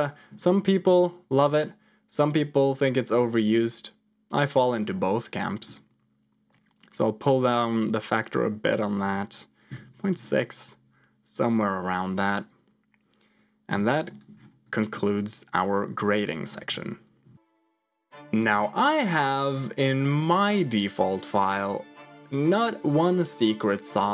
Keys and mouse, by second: 5.5 middle click, 6.5-10.2 drag, 12.0 click, 13.6 g, 14.8 middle click, 15.1 click, 16.6 ctrl+j, 17.2 F2.